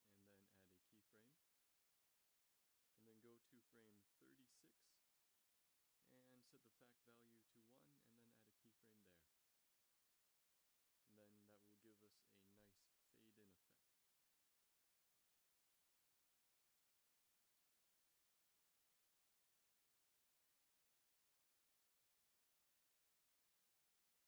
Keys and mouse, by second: 0.2 i, 2.1-2.6 drag, 4.8 Right, 5.0 Right, 7.9 i, 10.6-12.4 Left, 13.0 shift+z, 13.9 Right, 14.4 Right, 14.7 Right, 14.9 Right, 15.1 Right, 15.5 Right, 15.9 Right, 16.3 Right, 16.5 Right, 16.7 Right, 17.0 Right, 17.3 Right, 17.7 Right, 17.9 Right, 18.1 Right, 18.7 z, 19.1 z, 20.7 ctrl+s.